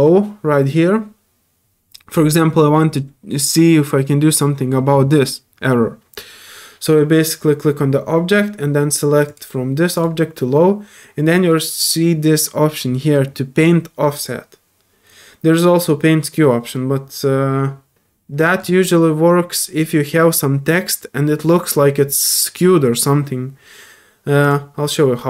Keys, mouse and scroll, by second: 2.1 middle click, 24.4 click.